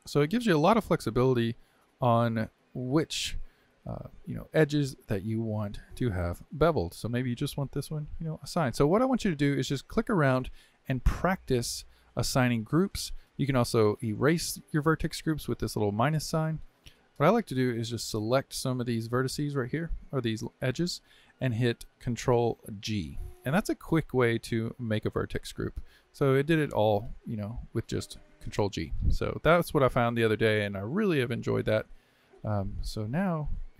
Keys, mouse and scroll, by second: 2.6 click, 3.5-6.5 middle drag, 6.8 click, 8.0 click, 8.8-13.4 middle drag, 15.0-17.0 drag, 17.6 shift+click, 18.6 shift+click, 19.6 shift+click, 20.7-22.8 middle drag, 22.8 ctrl+g, 25.8 click, 30.0-33.7 middle drag.